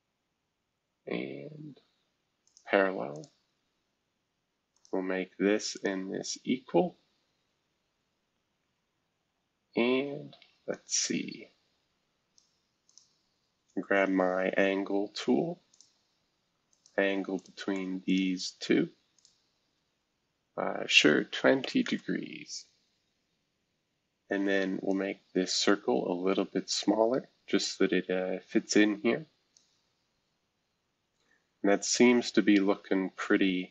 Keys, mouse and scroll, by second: 2.4 click, 3.1 click, 4.7 click, 5.7 shift+click, 7.1 scroll down 1, 7.8-8.5 scroll down 3, 8.9-10.0 scroll up 2, 10.0-10.7 scroll up 1, 10.7-12.4 drag, 12.9 click, 15.7 click, 16.7 shift+click, 17.4 click, 18.1 shift+click, 19.2 click, 21.1-22.1 typing, 24.9-30.2 drag, 30.2-30.9 scroll down 2, 30.9 scroll down 1, 31.1-31.7 scroll up 2, 31.7-32.6 scroll up 1.